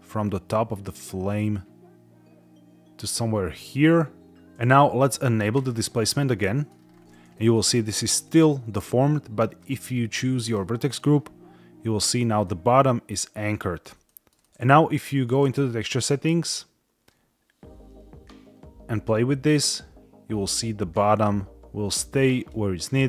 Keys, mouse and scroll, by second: 4.5 shift+middle click, 4.5 scroll up 2, 4.5 KP_1, 5.4 click, 6.2 middle click, 6.6 scroll down 3, 7.2 shift+middle click, 7.6-7.9 middle drag, 9.5 click, 12.3-13.7 middle drag, 12.3-13.4 scroll, 13.9 shift+middle drag, 14.3 middle click, 15.2 click, 16.9-22.4 drag, 22.7-23.0 drag.